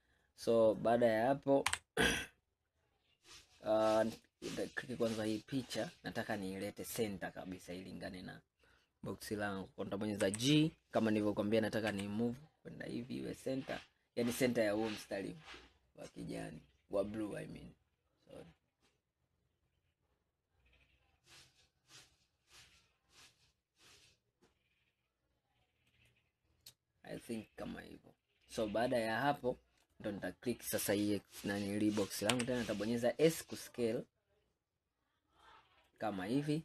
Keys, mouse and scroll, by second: 1.7 KP_1, 3.3-3.7 scroll up 2, 3.7 scroll down 1, 4.1 click, 5.8-6.8 scroll up 1, 10.3 g, 29.9 click, 32.3 s.